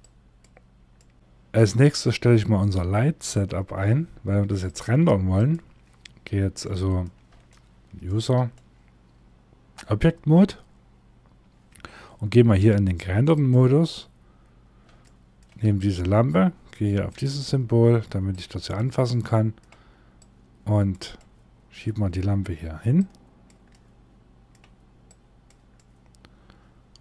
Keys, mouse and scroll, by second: 0.4 middle click, 1.1 shift+middle click, 4.1 click, 5.6-6.1 scroll down 1, 6.1 middle click, 7.0 shift+middle click, 8.0 middle click, 10.5 scroll down 1, 12.9 click, 14.6 shift+middle click, 15.3 click, 18.7 middle click, 19.7 click, 20.7 middle click, 22.5 click, 23.2 scroll down 1, 24.6 click, 25.2 middle click.